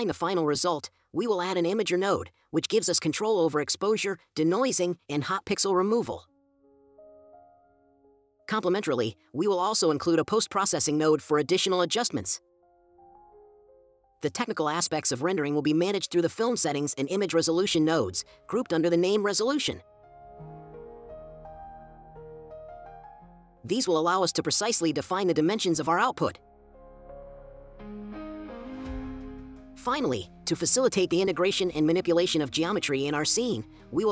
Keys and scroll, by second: 0.0-1.7 typing, 8.5-9.4 typing, 14.3-15.4 typing, 17.3-18.5 typing, 22.4-23.6 typing, 30.0-31.7 typing.